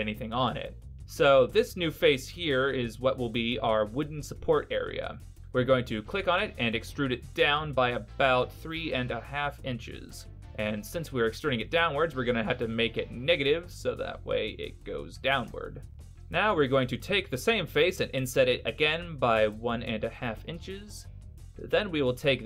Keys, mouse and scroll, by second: 5.3 middle click, 6.5 e, 9.4 click, 16.1 middle click, 16.1-16.4 scroll up 2, 18.3 i.